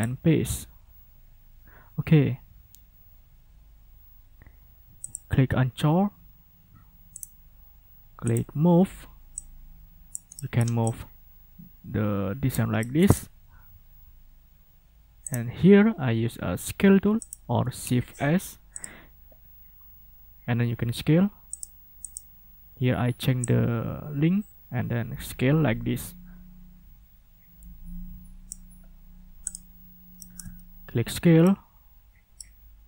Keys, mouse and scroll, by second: 0.0 click, 5.0 click, 7.1 right click, 8.2 click, 9.3 click, 10.3 middle click, 10.8-12.7 drag, 12.7 middle click, 15.2 right click, 17.2 click, 17.8 ctrl+scroll down 2, 18.7 click, 21.5 click, 22.0 click, 23.4-28.7 drag, 29.5 click, 30.2 ctrl+click, 30.6 ctrl+scroll up 2, 31.4-32.6 ctrl+drag.